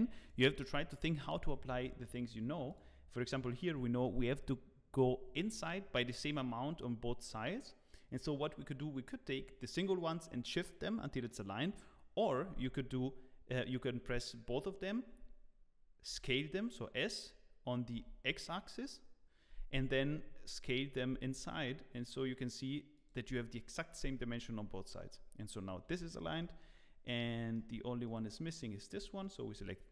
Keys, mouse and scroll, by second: 0.2 shift+click, 3.5 shift+click, 16.1 s, 25.8 Tab, 26.1 scroll down 2.